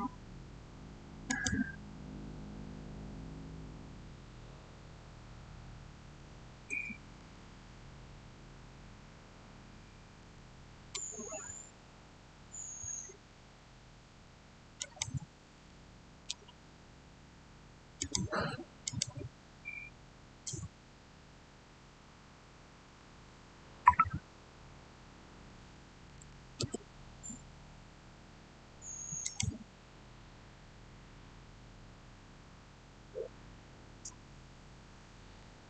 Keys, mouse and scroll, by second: 5.4-6.0 typing, 7.0 Return, 10.0 Return, 12.1-13.4 scroll up 1, 14.6-17.2 drag, 17.8 click, 26.1 6, 26.4 Return, 29.1 click.